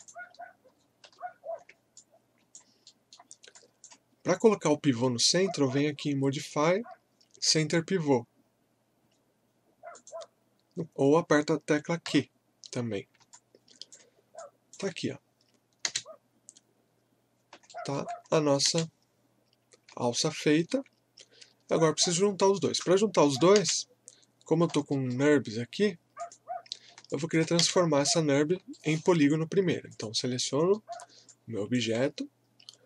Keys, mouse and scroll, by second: 0.0 click, 0.7-1.1 typing, 1.6 scroll up 1, 1.9 alt+click, 2.9 alt+middle click, 3.6 alt+click, 6.3 click, 9.9 click, 12.0 q, 12.9 scroll down 1, 13.3-15.9 alt+drag, 15.9 space, 17.1 scroll down 1, 17.7 alt+middle click, 18.2 scroll up 1, 18.6 space, 20.2-23.5 alt+middle drag, 23.5 space, 24.5 scroll down 1, 24.9 alt+middle click, 26.2 click, 26.7 scroll up 1, 27.1 alt+click, 27.6 space, 28.3 scroll down 1, 28.7 alt+middle click, 29.9 click, 30.7 alt+middle click, 31.3 click, 31.3-32.8 alt+drag.